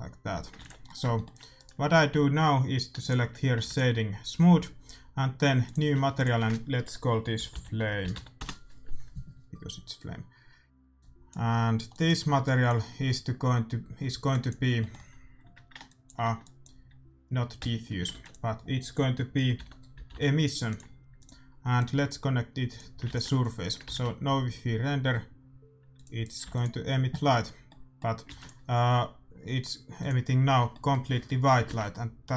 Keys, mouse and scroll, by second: 0.3 a, 0.5 ctrl+s, 3.5-4.8 drag, 3.7 ctrl+s, 5.6-7.9 drag, 10.9-18.3 drag, 13.9 middle click, 17.5 x, 18.0 shift+a, 21.7-23.6 drag, 23.0 ctrl+s, 25.1 shift+z, 25.9-27.7 drag, 26.5 ctrl+s, 27.6-29.6 middle drag, 28.2 shift+a, 30.6-32.3 middle drag, 31.6 shift+a.